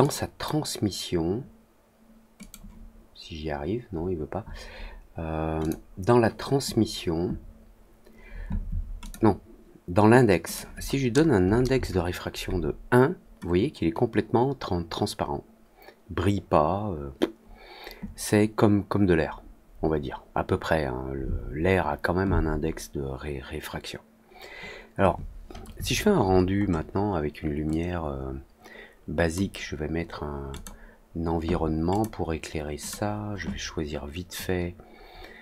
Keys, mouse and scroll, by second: 2.3 click, 5.5 click, 8.9 click, 10.4 click, 25.9 scroll up 1, 26.0 scroll down 1, 26.2 middle click, 26.5 middle click, 27.6-29.3 drag, 30.4 click, 31.8 click, 32.8 click.